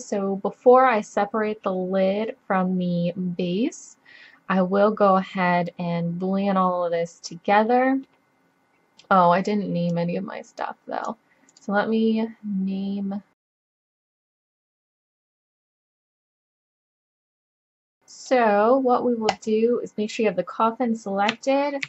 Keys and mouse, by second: 5.8 middle drag, 6.9-8.5 middle drag, 8.8-9.9 middle drag, 9.9-11.5 drag, 11.7-13.3 drag, 13.4 click, 13.6 f, 13.8 middle click, 13.8 click, 13.9 click, 14.6 click, 14.9 middle click, 15.0 click, 15.2 click, 15.3 middle click, 15.5 middle click, 15.6 click, 15.8 middle click, 15.9 middle click, 16.2 click, 16.9 middle click, 17.8-19.3 drag, 19.6 click, 21.0 right click, 21.2 middle click.